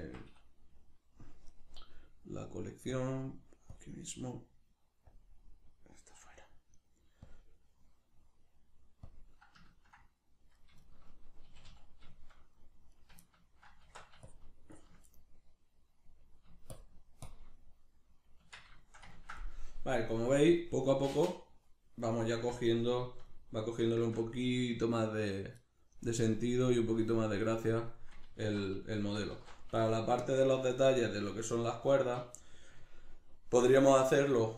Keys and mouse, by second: 3.0-9.8 drag, 9.8-10.6 ctrl+middle drag, 10.6 right click, 10.8-13.0 shift+middle drag, 11.4 a, 13.0 right click, 13.2-14.3 ctrl+middle drag, 13.8 Tab, 14.3 shift+click, 15.1-16.8 middle drag, 16.8 shift+click, 17.6-31.8 middle drag, 18.4 Tab, 28.4 alt+q, 29.3 alt+q, 31.8 right click.